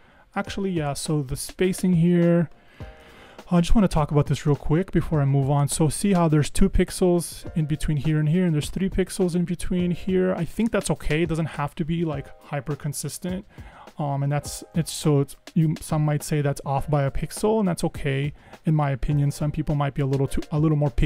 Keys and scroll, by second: 3.1 super+=, 16.4 super+=, 19.5 super+-.